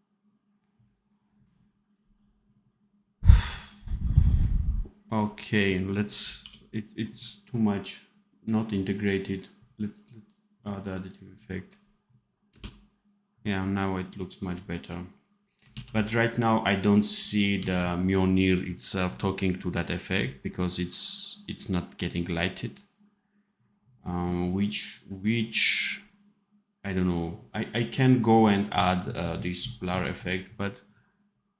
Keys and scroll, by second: 6.2 d, 12.4 space, 15.7 ctrl+s, 17.5 d.